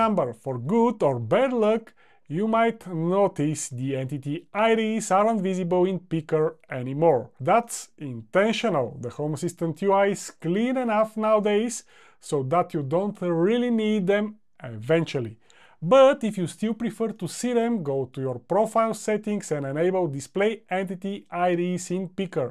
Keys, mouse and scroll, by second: 3.8 e.